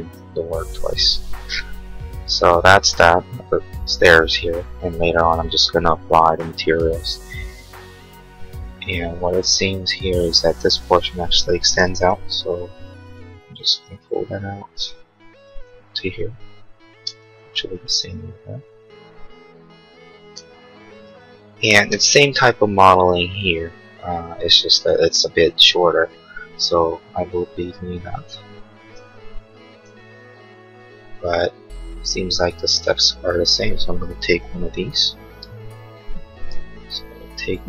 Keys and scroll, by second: 12.5 p, 16.8 space, 17.5 Escape, 36.7 m.